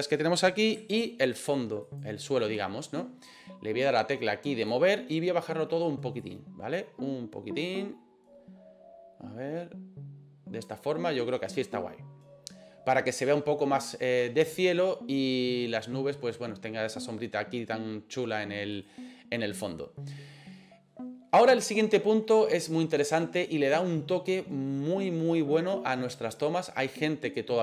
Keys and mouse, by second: 1.9 shift+right click, 4.6 click, 6.3-10.7 drag, 18.8 right click.